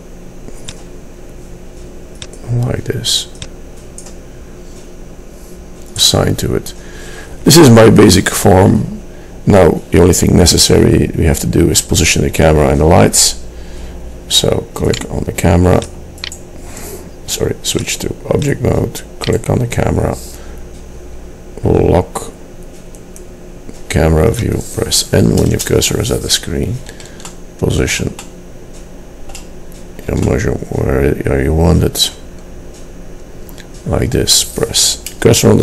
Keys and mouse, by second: 0.8-2.7 drag, 24.4-25.6 middle drag, 25.6 KP_0, 27.4-28.8 drag, 31.0-32.2 drag.